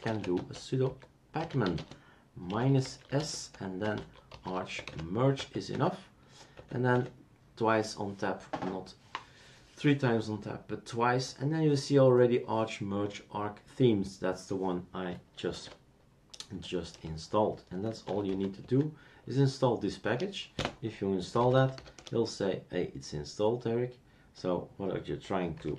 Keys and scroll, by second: 0.0-6.2 typing, 6.5 Tab, 6.9 Tab, 15.4 Tab, 15.5 typing, 16.9 Tab, 17.6-18.7 typing, 20.0 Return, 20.5-22.2 typing, 25.3-25.7 typing.